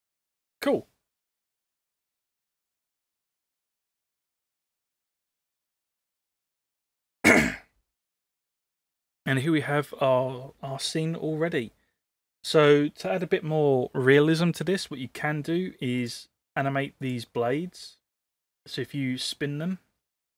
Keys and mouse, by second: 1.1 click, 4.1 click, 15.9 click.